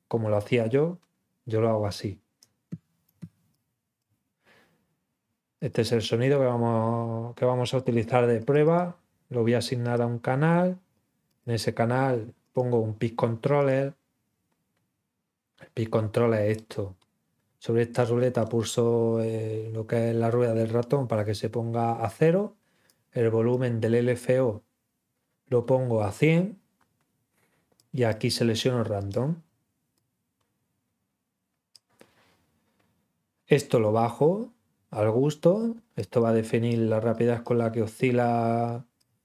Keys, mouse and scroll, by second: 2.3 click, 3.5 click, 5.5 click, 8.3 click, 8.6 click, 9.8 click, 11.3 click, 12.4 click, 13.5 click, 16.5-16.9 scroll up 1, 18.0-18.5 scroll down 2, 22.8 click, 27.7 click, 28.9 click, 29.9-31.7 drag, 33.5-35.9 drag, 36.1 click, 37.0 click, 38.6 click.